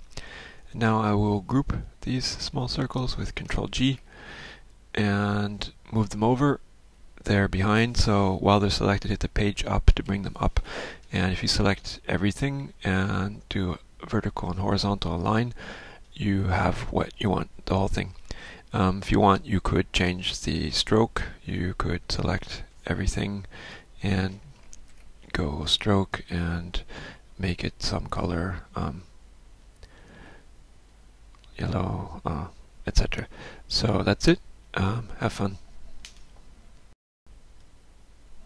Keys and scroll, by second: 1.9 F1, 3.9 ctrl+g, 10.1 Page_Up, 24.9 ctrl+shift+f.